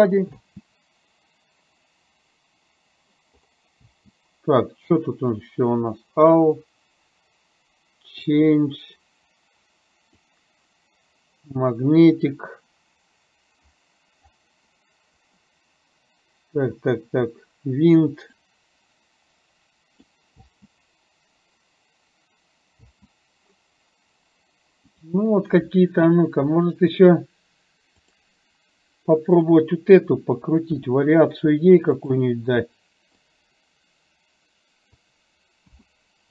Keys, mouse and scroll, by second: 0.4 space, 3.8 space, 5.4 click, 8.3-10.3 drag, 18.4-20.0 drag, 20.5 space, 23.0 space, 28.0 click, 30.9 r, 33.5-35.1 drag, 35.8 KP_0.